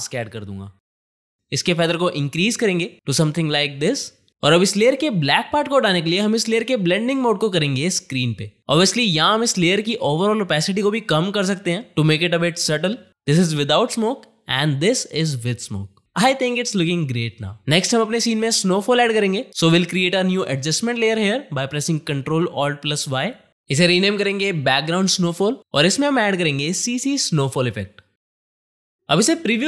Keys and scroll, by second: 23.5 Return, 23.7-25.3 typing, 26.3 ctrl+space, 26.7-27.7 typing.